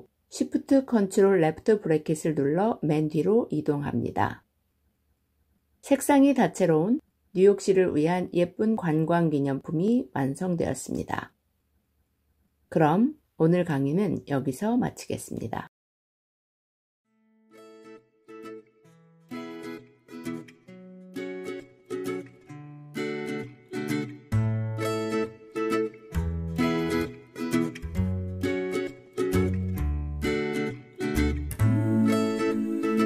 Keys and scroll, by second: 0.1 ctrl+shift+[.